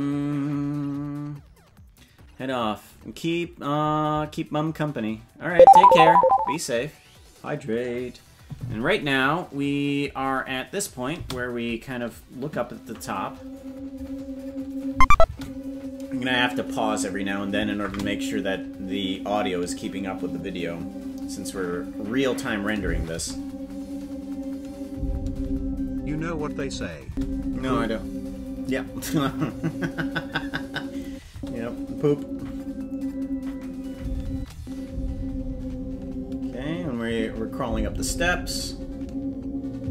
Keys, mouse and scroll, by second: 11.2 space, 14.9 space, 15.2 space, 17.6 space, 17.8 space, 22.9 space, 23.1 space, 26.7 space, 27.0 space, 31.0 space, 31.3 space, 34.3 space, 34.5 space, 36.8 space, 37.0 space.